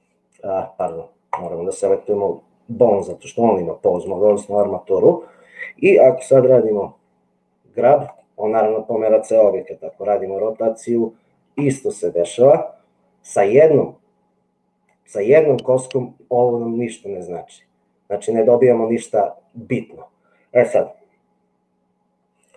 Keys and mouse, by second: 3.0-4.1 drag, 6.8 g, 10.1 r.